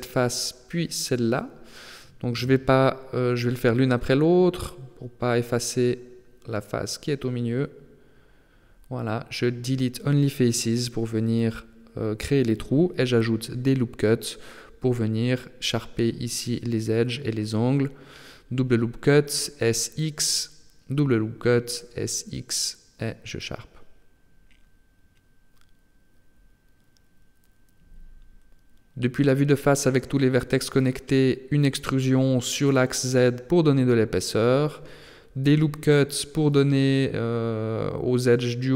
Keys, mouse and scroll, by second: 1.1 right click, 1.3 right click, 1.7 shift+right click, 2.7 shift+right click, 3.3 shift+right click, 3.6 shift+right click, 3.9 shift+right click, 4.2 shift+right click, 4.9 x, 6.7 right click, 6.9 shift+right click, 7.3 shift+right click, 7.5 shift+right click, 8.9 x, 10.4-10.7 scroll up 1, 11.3 ctrl+r, 14.3 ctrl+r, 16.7 ctrl+r, 21.1 ctrl+r, 25.0 click, 26.0 middle click, 28.0 a, 28.4 a, 29.1 KP_1, 30.5 e, 34.5-35.3 scroll up 1, 35.3 ctrl+r.